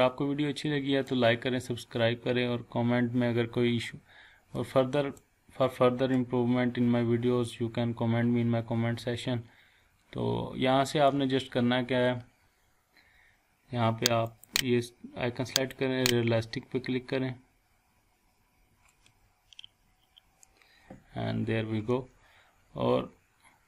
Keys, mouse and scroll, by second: 4.6-5.2 middle drag, 14.3 click.